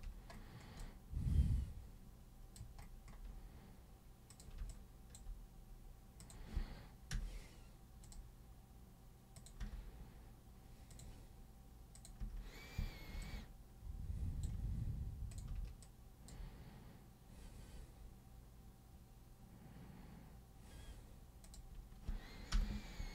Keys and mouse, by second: 0.8-2.5 alt+super+drag, 4.3 super+click, 4.7 alt+super+click, 6.2 click, 7.1 Return, 8.0 click, 9.3 click, 9.6 Return, 10.9 click, 11.9 super+click, 12.2 super+', 13.2-14.4 alt+super+drag, 15.3 super+click, 15.8 alt+super+click, 21.4 super+click, 22.5 super+Return.